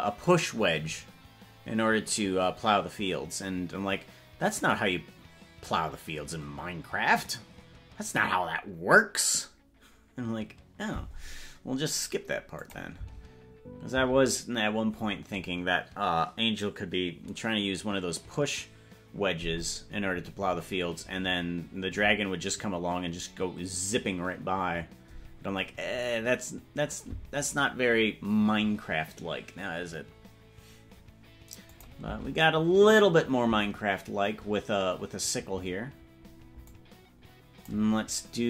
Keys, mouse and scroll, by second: 12.7 click, 13.1 space, 14.3 space, 31.8 click, 32.1 space, 33.7 space, 36.8-37.9 drag.